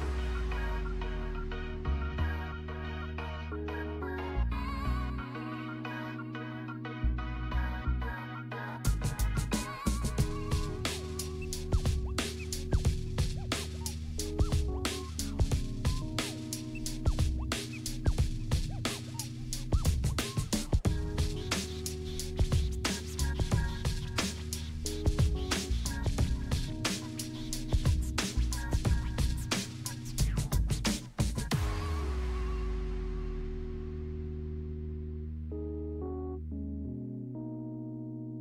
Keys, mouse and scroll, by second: 0.5-2.3 drag, 3.9-5.0 scroll down 1, 5.0 click, 6.1 scroll up 1, 7.5-10.5 drag, 12.1 Down, 13.1 click, 13.5-14.0 scroll down 1, 14.4 click, 14.9 scroll up 1, 16.3-21.2 drag, 22.4 click, 23.2 scroll up 1, 24.1 click, 24.4 scroll down 1, 25.6-27.0 drag, 27.4-27.8 scroll up 1, 29.4 click, 30.7 scroll down 1, 31.4 click, 32.9 e, 33.7-36.1 drag, 36.8 t, 37.5 click, 38.0 scroll up 1.